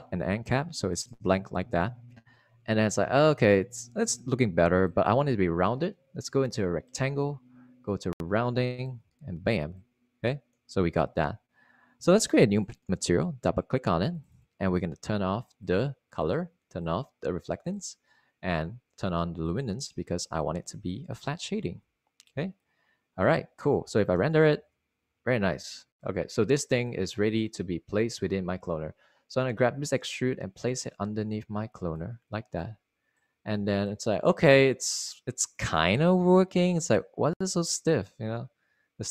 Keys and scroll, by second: 25.7 super+r, 28.3 Escape.